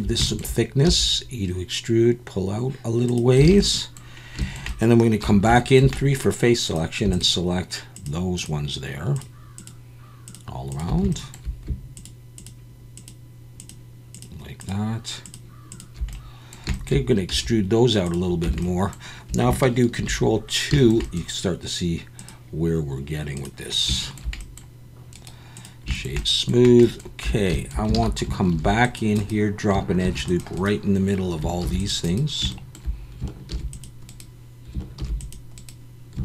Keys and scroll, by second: 0.9 e, 3.5 alt+a, 5.2 3, 17.3 e, 18.4 Tab, 20.0 ctrl+2, 27.2 Tab, 28.0 alt+a, 28.5 ctrl+r, 30.0 ctrl+r, 31.6 ctrl+r, 33.5 ctrl+r, 35.0 ctrl+r.